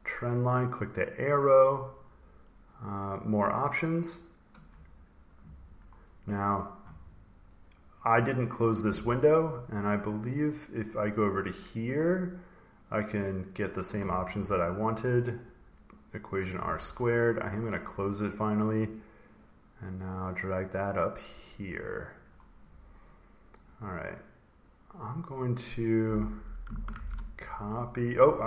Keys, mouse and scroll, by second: 1.3 click, 4.0 click, 9.4 click, 10.1 click, 11.4 click, 13.4 click, 14.9 click, 15.4 click, 17.6 click, 18.7 click, 21.2 click, 22.0 click, 23.5 click, 23.7 click, 26.3 click, 26.8 ctrl+c, 27.5 click.